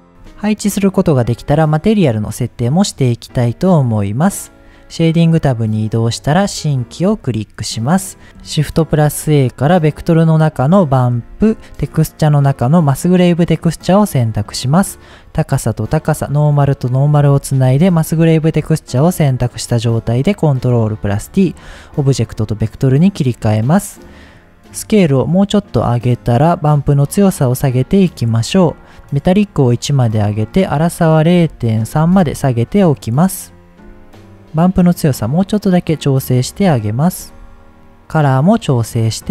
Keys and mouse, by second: 1.5-2.2 drag, 2.2-2.9 middle drag, 3.5-5.0 drag, 6.6-7.0 shift+middle drag, 9.0 shift+a, 11.3 shift+a, 14.3-15.2 drag, 15.7-16.4 drag, 16.8 click, 17.7 ctrl+t, 18.4 shift+click, 19.4-20.0 drag, 20.3 click, 21.5 shift+middle click, 23.0 middle click, 24.9-26.0 drag, 26.8-28.4 drag, 29.5 click, 30.4-32.8 drag, 34.0-36.6 shift+drag, 37.1 shift+click, 38.4 click.